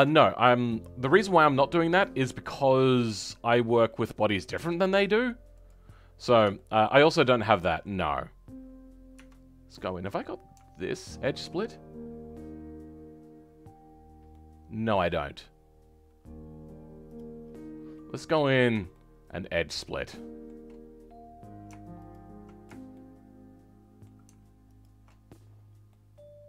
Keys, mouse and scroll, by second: 1.1-1.5 scroll down 3, 1.5-5.5 middle drag, 5.5 click, 5.9-6.5 scroll up 2, 6.5-7.9 shift+middle drag, 7.9-8.7 scroll up 6, 8.7-9.1 scroll up 4, 9.1 Tab, 10.0 scroll up 2, 13.6-14.2 scroll up 2, 14.2-17.1 middle drag, 17.1 click, 17.3-18.2 scroll down 10, 18.2-22.0 middle drag, 22.0 alt+shift+click, 22.9-24.7 shift+middle drag, 24.7 alt+shift+click, 25.4-25.8 scroll down 6, 25.8-26.4 middle drag.